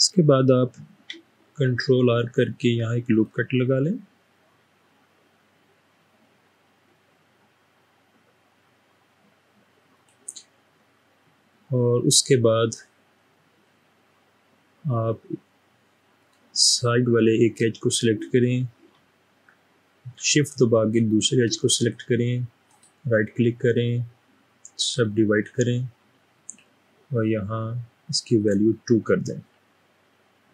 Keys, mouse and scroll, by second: 2.0 ctrl+r, 3.2 click, 10.0 click, 16.2 click, 22.7 right click, 28.4 click.